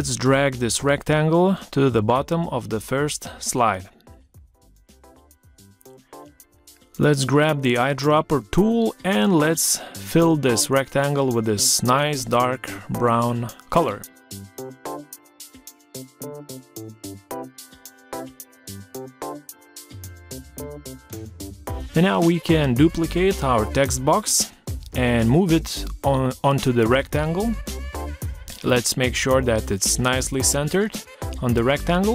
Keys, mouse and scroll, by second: 0.5 shift+click, 13.8 click, 20.5 ctrl+c, 21.5 ctrl+v, 23.8 shift+click.